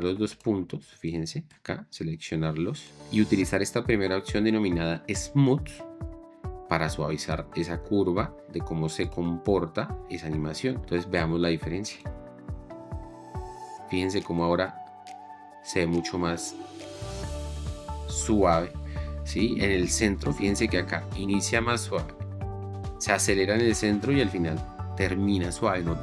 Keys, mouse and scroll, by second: 12.6 space.